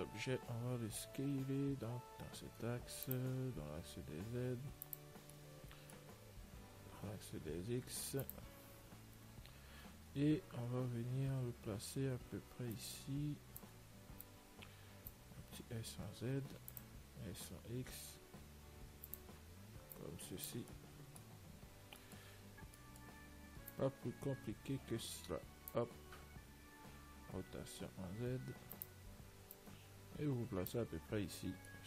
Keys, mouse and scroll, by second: 0.1 l, 3.7 s, 5.8-9.5 middle drag, 7.2 s, 10.4 z, 10.8-12.9 middle drag, 11.9 z, 13.1-16.4 drag, 17.6 s, 19.6-25.0 middle drag, 20.3 click, 24.0 click, 26.6-29.0 middle drag, 27.6 r, 29.8 click, 31.5 Tab.